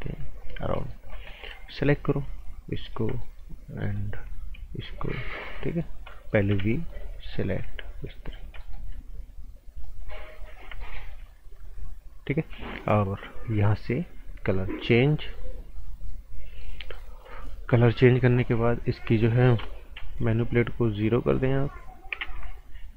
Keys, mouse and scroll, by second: 0.6 scroll down 1, 0.8 right click, 1.1 scroll up 1, 1.3 right click, 1.7-2.2 scroll up 1, 3.2 right click, 4.8 shift+click, 5.3 scroll down 1, 5.5 right click, 6.5 b, 6.7 right click, 7.4 click, 8.2 shift+click, 8.6 right click, 9.7 shift+click, 10.3 shift+click, 10.8 right click, 11.5 click, 13.5 click, 15.7 right click, 17.1 scroll up 1, 17.3 right click, 18.5 click, 19.9 s, 21.3 click, 22.2 KP_Enter.